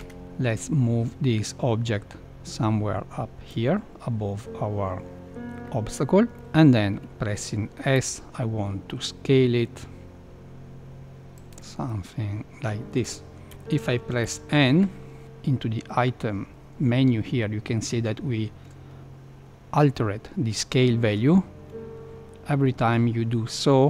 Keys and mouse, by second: 0.0 click, 0.5 click, 6.3-7.9 middle drag, 7.9 KP_7, 7.9 s, 11.8-13.0 middle drag, 13.5 KP_7, 14.2 n.